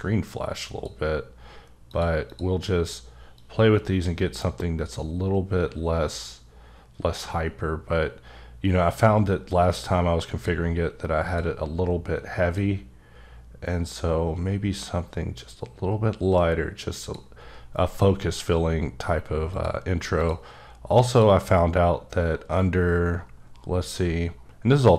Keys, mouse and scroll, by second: 1.9 click, 2.3 click, 3.3 click, 11.2 click, 12.5 click, 19.5 click, 20.2 click, 21.1 click, 21.6-22.3 scroll down 5, 22.3-24.3 scroll up 16.